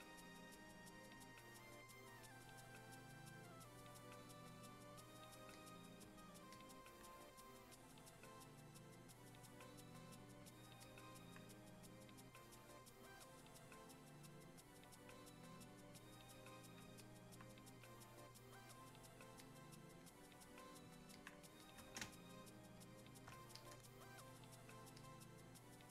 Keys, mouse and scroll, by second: 22.0 space, 22.7 click, 23.1 space, 23.5-25.9 drag.